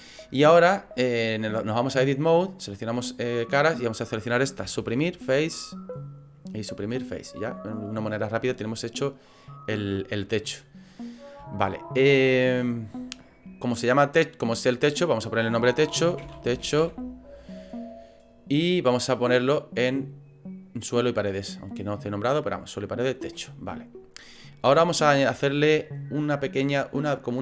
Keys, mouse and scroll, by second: 1.4 click, 3.0 click, 3.7 right click, 4.6 Delete, 6.5 right click, 6.8 Delete, 7.5 middle click, 9.4 click, 10.5 middle click, 11.1 scroll up 4, 11.5 shift+middle click, 14.9 click, 15.0 click, 19.2 click, 21.4 click, 23.5 middle click, 24.4 middle click.